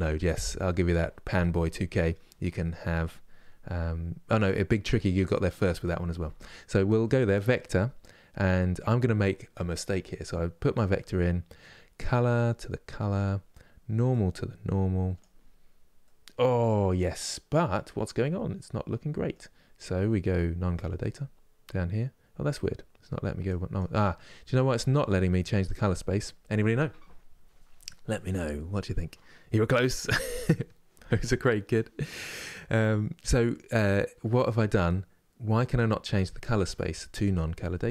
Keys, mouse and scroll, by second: 12.8 click, 13.8-15.7 drag, 15.7-18.7 middle drag, 23.1-37.9 drag.